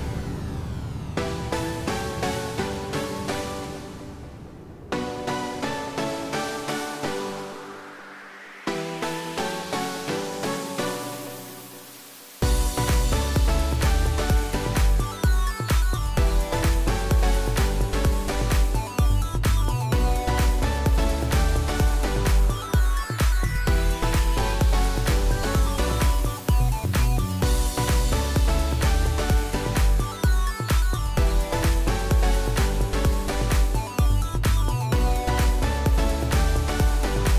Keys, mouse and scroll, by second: 10.1 typing, 15.1 click, 25.3 click, 33.1 click.